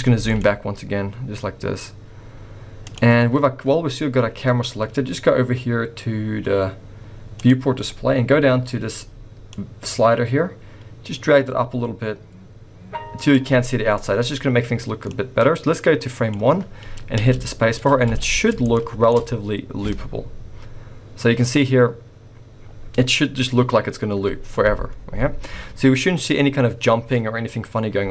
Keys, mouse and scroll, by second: 0.2 g, 7.4 click, 9.5 click, 14.1-14.6 scroll up 1, 15.1 click, 17.4 space, 17.9 scroll up 1, 18.1 alt+a, 18.6 shift+middle click, 24.9-25.9 scroll down 3, 25.9-26.3 scroll up 2.